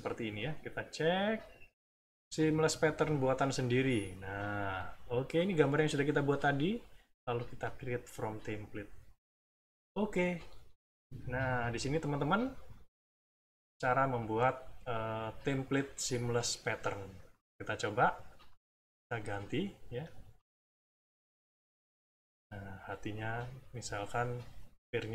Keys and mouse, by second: 0.8-2.1 drag, 4.0 click, 7.6 click, 9.0 click, 10.4-11.5 middle drag, 14.0 middle click, 15.0 middle click, 17.3 click, 18.4 click, 19.1 click, 21.5 click, 22.2 click, 22.8 click, 23.6 click, 24.3 click.